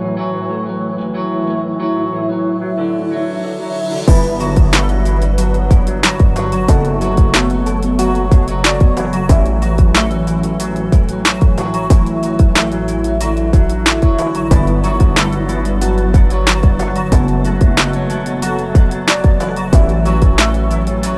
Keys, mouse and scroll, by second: 2.7 click, 9.6 click, 19.0 z, 19.9 click.